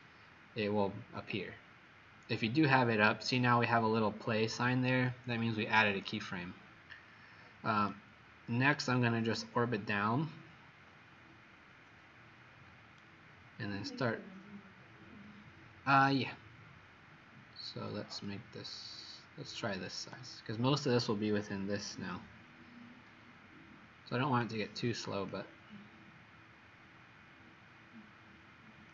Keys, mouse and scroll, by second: 7.9 right click, 13.7-14.2 scroll up 2, 18.3 click.